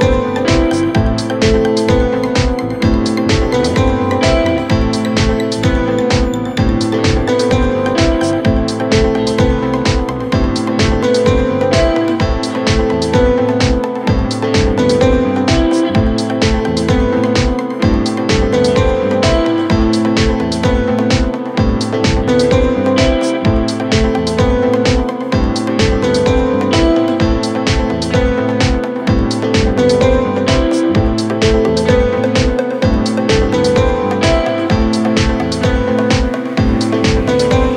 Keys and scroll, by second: 27.4 Delete.